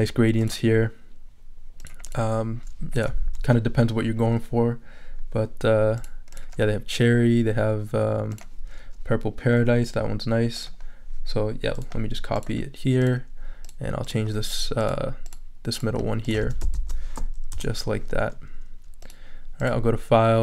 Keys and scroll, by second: 16.4 super+a, 16.7 super+v, 17.5 super+Return.